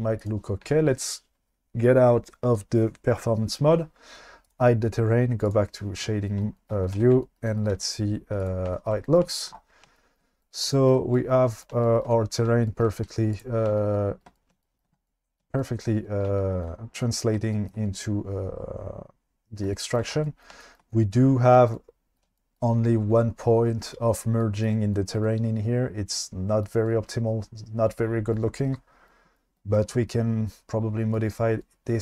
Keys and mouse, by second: 4.4 click, 5.5 click, 7.1 alt+z, 7.7 q, 11.7-12.0 shift+middle drag, 12.6 shift+middle drag, 13.0 q, 29.2-29.6 shift+middle drag, 30.2-31.5 middle drag.